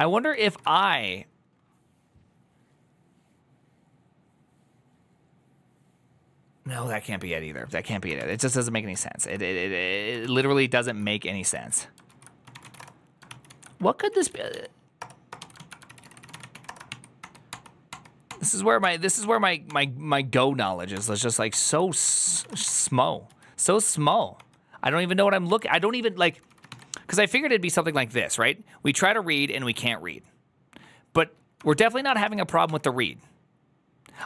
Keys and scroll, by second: 0.2 ctrl+c, 0.3-1.1 typing, 9.0 ctrl+t, 9.0 ctrl+n, 10.1 ctrl+t, 10.7 ctrl+h, 11.4 ctrl+t, 11.9 ctrl+e, 12.2-16.9 typing, 13.2 ctrl+c, 13.4 ctrl+p, 17.1 ctrl+d, 17.3 ctrl+d, 18.0 ctrl+d, 18.2 ctrl+d, 21.9 ctrl+d, 21.9 ctrl+c, 22.0-22.8 typing, 23.1 ctrl+u, 26.0-27.0 typing, 32.3-33.0 typing, 34.2 ctrl+c.